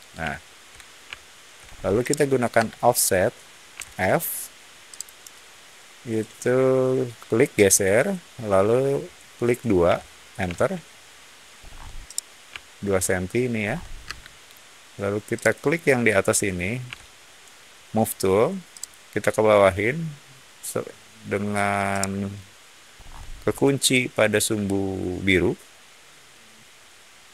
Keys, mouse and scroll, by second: 0.2-1.4 shift+middle drag, 1.6 shift+middle click, 1.9 shift+middle click, 2.4 space, 3.7 f, 4.8 click, 9.8 2, 10.4 Return, 11.5 middle click, 11.5-11.9 scroll up 1, 11.9-13.3 middle drag, 13.5-13.9 scroll up 1, 13.9 space, 15.3 click, 16.8 m, 18.6 click, 21.8 middle click, 22.9 middle click.